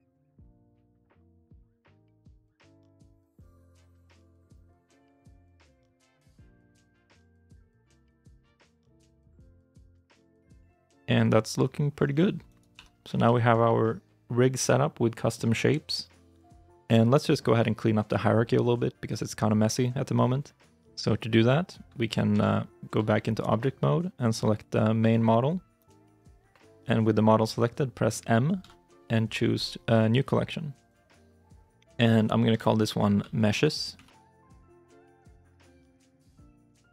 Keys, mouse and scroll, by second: 2.9 middle click, 8.3 right click, 8.6 scroll down 1, 8.7 middle click, 10.1 right click, 10.4 shift+middle click, 10.6 middle click, 11.3-11.9 scroll up 1, 11.9 scroll down 1, 12.3 right click, 12.6 a, 12.9 middle click, 13.2 shift+middle click, 13.5-15.5 shift+scroll up 2, 22.2 ctrl+Tab, 23.0 shift+middle click, 23.3 shift+middle click, 25.6 right click, 28.4 m, 33.3-34.2 typing, 36.4 -, 36.4 shift+a, 36.7 s.